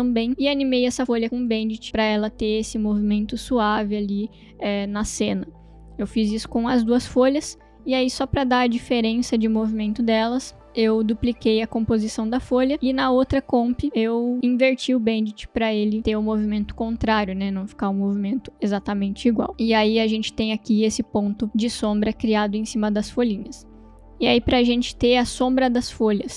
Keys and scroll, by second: 1.7 space, 10.6 space, 17.1 space.